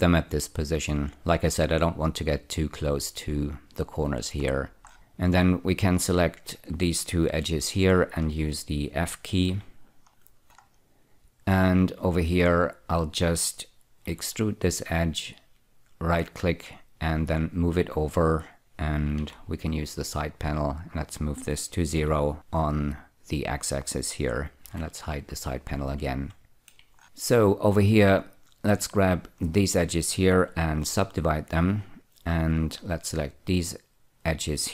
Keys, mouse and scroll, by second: 4.9-5.9 scroll up 1, 5.9 click, 8.2 shift+click, 9.8 f, 10.5-12.8 scroll down 2, 12.8 click, 14.4 4, 14.6 right click, 16.9 click, 19.5 n, 21.5 click, 22.3 0, 22.3 Return, 25.0 n, 26.6 shift+middle click, 28.3-29.9 drag, 31.1 <, 32.8 click.